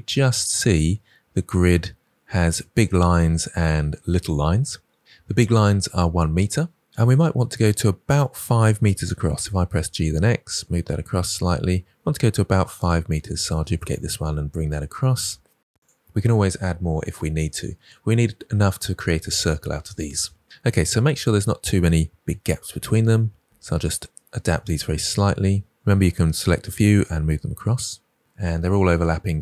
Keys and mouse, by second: 9.0 g, 9.3 x, 12.7 click, 13.6 shift+d, 13.8 x, 22.1 g, 23.3 x, 23.6 click, 26.4 g, 26.6 x, 27.9 click.